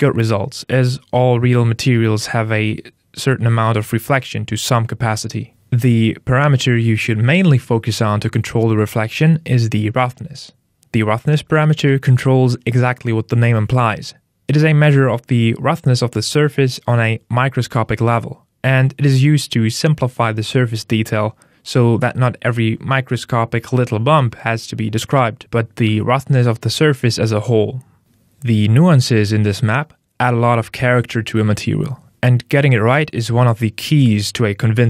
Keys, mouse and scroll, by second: 7.8 click, 20.2 click, 22.7 click.